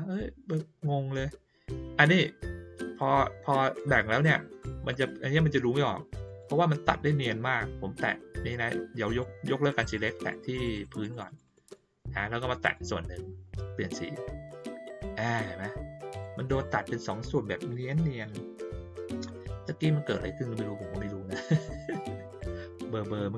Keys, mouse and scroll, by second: 4.9 click, 6.2 click, 8.3 click, 9.0 click, 9.7 click, 9.9 click, 10.3 click, 10.5 click, 10.7 click, 10.9 click, 11.1 click, 11.2 click, 11.4 click, 11.6 click, 12.6 click, 14.4 click, 16.1 click.